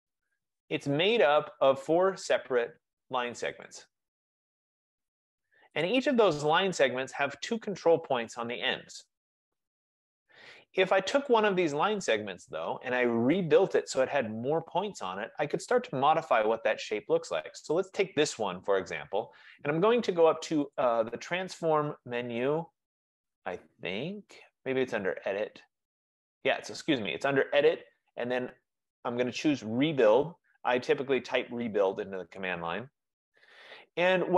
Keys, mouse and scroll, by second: 0.0-0.1 typing, 0.4 Return, 1.2 right click, 1.3 typing, 1.5 click, 2.5 click, 3.8 click, 4.7 click, 5.4 typing, 5.9 click, 11.3 click, 13.0 F15, 16.1 click, 20.9-26.0 drag, 32.6 click.